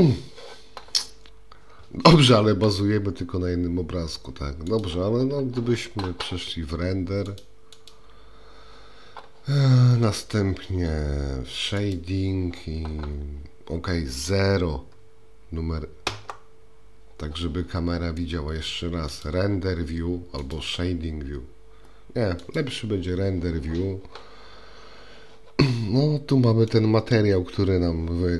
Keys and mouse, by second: 2.5 g, 7.4 click, 11.9 click, 16.1 KP_0, 19.2 click, 26.7 middle click.